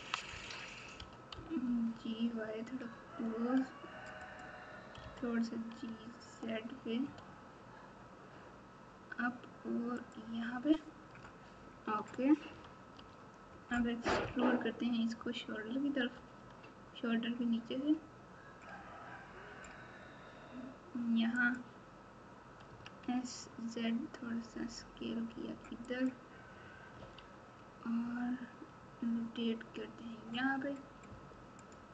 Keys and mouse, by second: 0.9 g, 5.0 g, 12.9 Tab, 14.2 KP_1, 16.1 e, 22.6 s, 26.9 r.